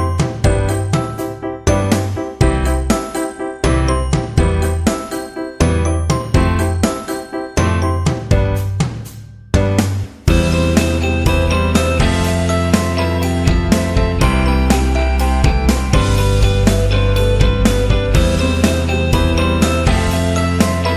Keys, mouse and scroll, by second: 0.2 Tab, 0.4 click, 1.1 e, 2.1 Tab, 2.5 click, 3.1 click, 4.2 click, 5.2 click, 5.8 s, 7.2 shift+z, 9.1 shift+z, 9.4 click, 9.9 r, 11.2 click, 12.3 shift+z, 15.4 shift+z, 16.6 click, 16.9 Tab, 19.3 middle click, 20.1 click.